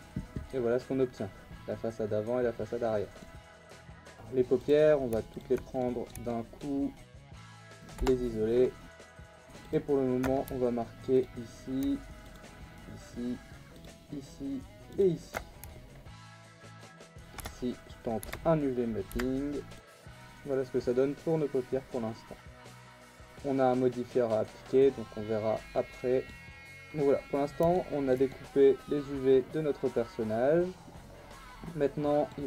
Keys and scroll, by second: 3.7 /, 3.9 Tab, 7.9 /, 8.9 Tab, 16.0 ctrl+e, 16.4 Tab, 16.7 /, 17.4 Tab, 18.2 a, 19.1 u, 19.8 u, 26.6 Tab.